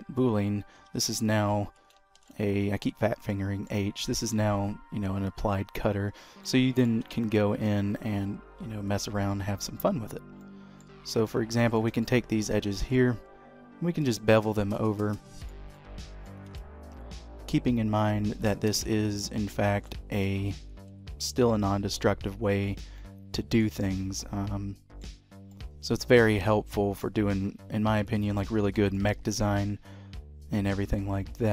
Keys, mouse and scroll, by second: 0.3-1.0 scroll down 1, 1.0-2.0 scroll down 1, 1.0 h, 2.3 ctrl+z, 3.4 middle click, 4.1 g, 6.2 scroll up 2, 6.6 middle click, 7.2 Tab, 7.4-9.0 scroll up 1, 9.0 click, 9.3 scroll down 2, 10.1-10.4 scroll up 1, 10.5 middle click, 11.8 shift+click, 12.1 middle click, 13.0 ctrl+b, 15.8 middle click, 16.6 Tab, 16.8-18.6 scroll down 1, 18.6-19.0 scroll down 2, 18.6 h, 19.8 ctrl+z, 20.3 g, 23.1 middle click, 24.0-24.4 scroll up 4, 24.3 middle click, 25.2-25.8 scroll down 4, 25.6 middle click, 28.2 click, 28.5 scroll up 3, 28.9 shift+middle click, 29.3 g.